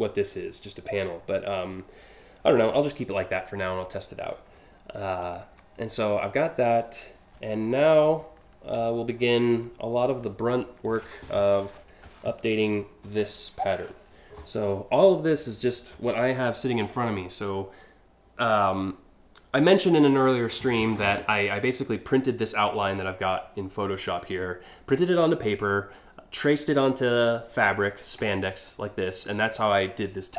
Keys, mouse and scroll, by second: 4.9 click, 4.9 a, 7.6 scroll up 1, 8.5-8.9 alt+scroll up 3.